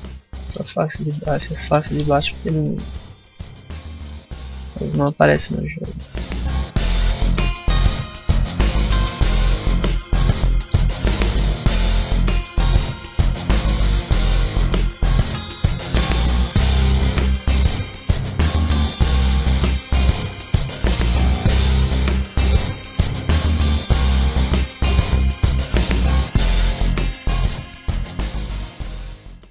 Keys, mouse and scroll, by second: 0.3 right click, 0.9 shift+right click, 1.5 alt+right click, 1.9 middle click, 5.0 x, 6.1 middle click, 6.6 middle click, 7.1 right click, 8.0 l, 8.8 x, 9.3 middle click, 11.0 Tab, 11.3 middle click, 11.9 Tab, 12.5 Tab, 12.8 middle click, 13.2 scroll up 1, 13.3 Tab, 13.7 shift+middle click, 14.4 middle click, 14.5 Tab, 14.9 Tab, 15.6 click, 16.0 scroll down 1, 16.1 middle click, 16.6 right click, 16.9 shift+right click, 17.6 right click, 18.3 right click, 18.6 shift+right click, 19.0 w.